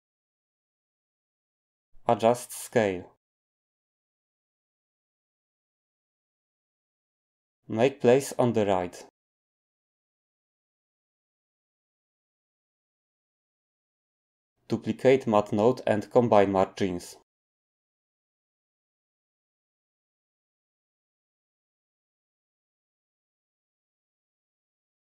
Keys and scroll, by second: 11.3 g, 15.7 d.